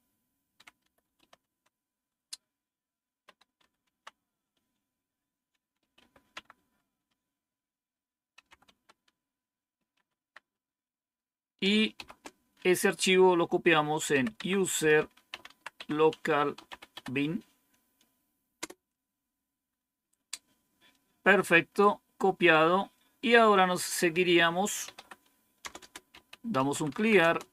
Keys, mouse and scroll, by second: 0.1-1.5 typing, 3.1-4.0 typing, 5.2-6.4 typing, 8.0-10.4 typing, 11.8-17.3 typing, 18.5 Return, 24.5-27.4 typing.